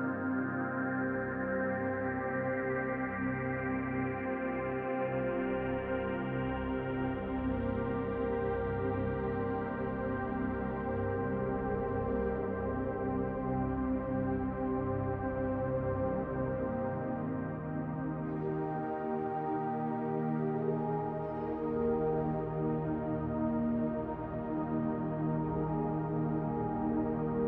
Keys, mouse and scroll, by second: 1.5 l, 2.1 middle click, 4.6 Delete, 6.0 click, 7.1 l, 8.4 shift+d, 9.4 click, 11.5 r, 13.2 click, 14.5 click, 16.8 middle click, 17.7 click, 19.0 middle click, 19.8 Tab, 20.3 scroll down 1, 20.5 middle click, 21.8 Tab, 22.3-22.9 scroll up 2, 23.1 click, 23.7 shift+click, 25.4 l, 26.0 l, 26.9 Delete.